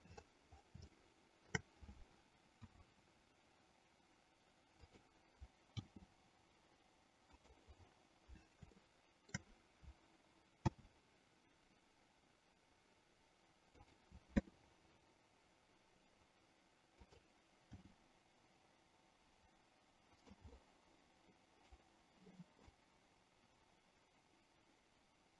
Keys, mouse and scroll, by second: 1.2-1.8 shift+middle drag, 2.7 s, 5.9 g, 8.9-9.5 shift+middle drag, 10.9 s, 14.5 r, 17.9 g, 20.8-21.9 middle drag, 23.0-25.3 drag.